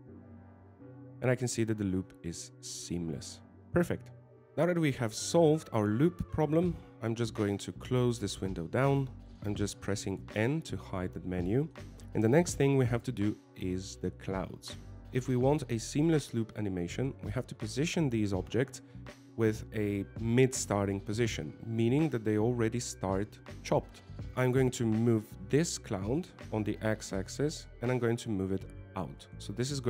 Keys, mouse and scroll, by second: 1.6 alt+a, 3.2 alt+a, 4.4 shift+middle click, 4.4 scroll down 3, 5.2 n, 6.1 n, 9.1 click, 10.7 scroll down 2, 12.1 n, 12.7 middle click, 14.8 right click, 24.3 shift+middle click, 24.7 shift+middle click, 25.2 middle click, 27.3 g.